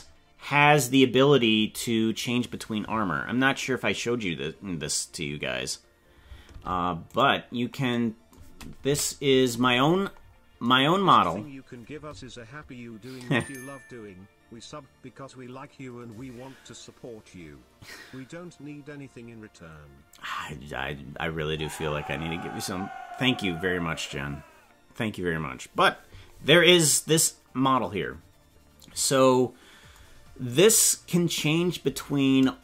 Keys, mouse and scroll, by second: 0.8 right click, 6.5 ctrl+Tab, 7.1 right click, 8.8 KP_Decimal, 9.6-10.3 scroll down 16, 31.6-32.6 scroll up 5.